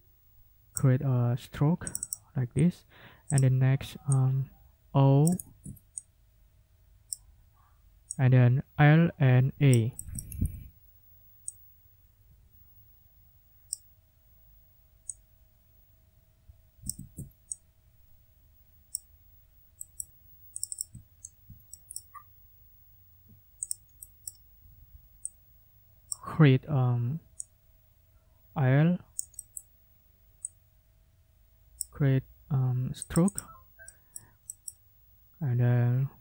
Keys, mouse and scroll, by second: 1.9 click, 3.3 click, 4.1-5.4 drag, 5.4 ctrl+z, 6.0-7.3 ctrl+drag, 8.1-9.9 scroll up 2, 10.1 ctrl+click, 10.3 ctrl+scroll up 2, 11.5-13.9 drag, 15.1-17.1 drag, 16.9 ctrl+z, 17.5-19.1 ctrl+drag, 19.8 click, 20.6 click, 21.2 ctrl+scroll down 2, 21.7 ctrl+click, 23.6 click, 24.0 click, 25.3-26.3 drag, 27.4-29.7 drag, 30.4-32.0 drag, 33.0 click, 33.8 click, 34.5 middle click, 34.8-36.2 drag.